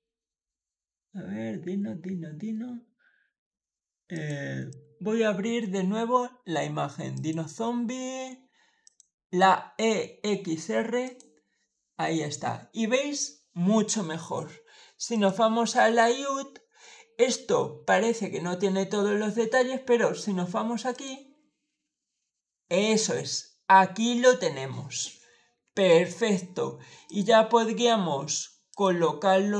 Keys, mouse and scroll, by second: 4.0 click, 4.6 click, 7.0 click, 8.7 click, 10.9 click, 15.0 click, 20.8 click, 24.5-25.7 middle drag, 26.9 click, 28.6 click.